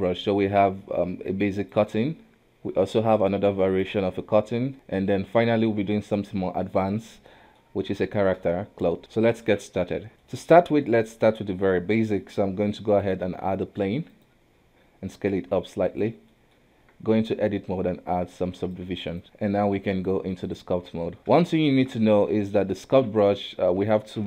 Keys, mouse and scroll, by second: 1.6 click, 2.0 KP_1, 2.4-3.1 middle drag, 3.1 click, 3.7 click, 4.3-5.3 middle drag, 5.3 click, 6.2 click, 7.2-7.6 middle drag, 7.6-8.1 scroll up 1, 8.1 shift+middle drag, 8.4 scroll up 2, 8.9 middle click, 9.0 scroll down 2, 9.1 middle click, 10.1 click, 10.2-13.0 shift+middle drag, 13.0-15.3 drag, 15.3 s, 16.3-16.6 middle drag, 16.6 Tab, 17.9 w, 18.8 w, 19.2 Tab, 20.0-21.2 drag, 21.2-21.5 scroll down 2, 21.5-24.2 shift+middle drag.